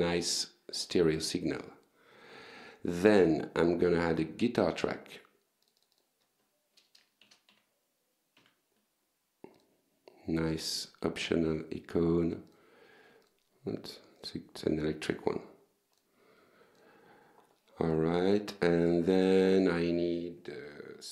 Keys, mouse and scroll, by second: 1.3 right click, 2.2 click, 3.3 click, 5.1 shift+g, 5.4 shift+t, 6.3 r, 7.6 click, 9.0 click, 10.9 click, 11.7 click, 12.7 click, 13.8 click, 14.6 click, 15.6 click, 16.7 click, 17.0 right click, 17.5 click, 20.1-21.1 typing.